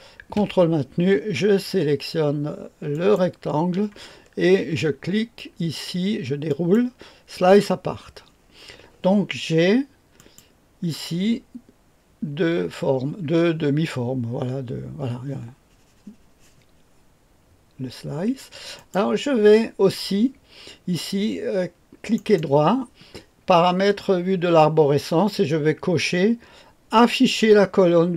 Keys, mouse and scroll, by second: 2.9 ctrl+click, 6.4 click, 7.5 click, 10.1 click, 18.7 click, 22.1 click, 22.1 right click.